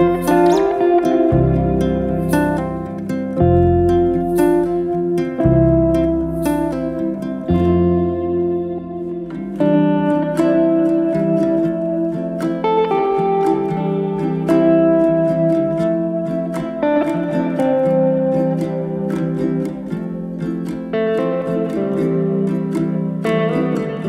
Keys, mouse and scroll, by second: 0.5-2.1 middle drag, 2.1 click, 2.6 middle click, 2.9 scroll down 2, 3.1 middle click, 3.6 KP_1, 4.0 scroll up 2, 4.2 middle click, 4.6 scroll down 1, 4.9-6.4 middle drag, 6.4 click, 6.8-7.8 scroll up 2, 7.8 click, 8.1 shift+click, 8.8 shift+click, 9.0 shift+click, 9.5 shift+click, 9.7 shift+click, 10.2 shift+click, 10.6 shift+click, 11.2 shift+click, 11.4 shift+drag, 11.7-12.5 middle drag, 12.5 shift+click, 12.7 shift+click, 13.3-13.8 middle drag, 13.8 shift+click, 14.0 shift+click, 14.2-15.0 middle drag, 15.0 shift+click, 15.3 shift+click, 15.7 shift+click, 16.2-17.3 middle drag, 17.3 shift+click, 17.5 shift+click, 18.2 shift+click, 18.5 shift+click, 18.8-23.0 middle drag, 23.2-24.0 middle drag.